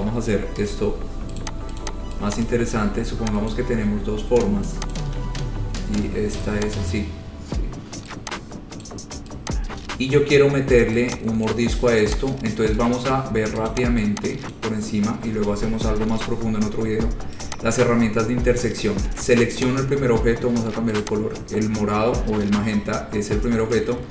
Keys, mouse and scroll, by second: 0.8 Delete, 1.6 click, 2.0 click, 2.0 scroll down 3, 2.7 click, 2.9 scroll, 3.8 click, 3.8 right click, 5.2 shift+click, 5.4 shift+click, 7.1 click, 9.1 click, 10.6-11.0 scroll, 11.7 click, 12.4 click, 12.6-13.3 scroll, 13.9 click, 14.8 click, 17.7 click, 19.8 click, 21.3 click.